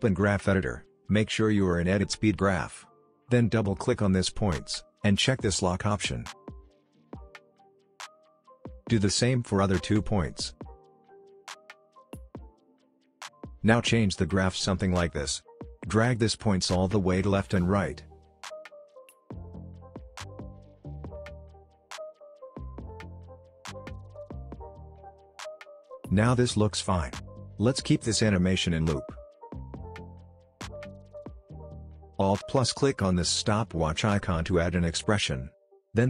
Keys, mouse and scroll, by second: 0.1 click, 0.1 click, 1.2 right click, 2.9 click, 5.0-16.4 drag, 23.7 space, 26.7 space, 27.4 click, 30.9 click, 33.9 click, 34.8 alt+click, 35.6-36.0 typing.